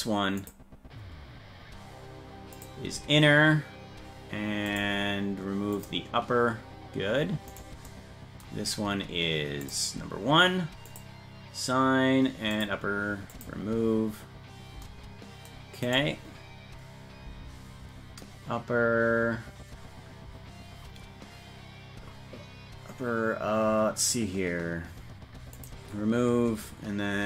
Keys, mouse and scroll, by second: 0.4 click, 2.5 click, 4.7 click, 5.7 click, 7.5 right click, 9.6 click, 10.8 click, 12.5 click, 13.3 click, 15.8 right click, 25.5 click.